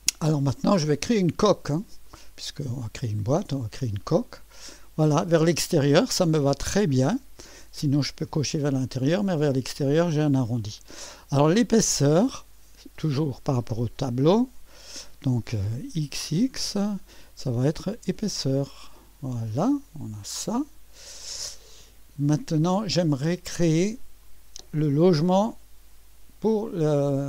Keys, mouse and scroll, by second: 0.6-1.3 typing, 1.3 click, 2.3-4.2 drag, 4.4-7.3 drag, 8.6-9.3 scroll up 1, 9.3-10.6 drag, 12.4 click, 14.6 ctrl+v, 16.0 typing, 17.7 click, 18.6-19.8 drag, 20.7-21.7 drag, 21.9-22.8 drag, 23.4 click, 24.2 middle click.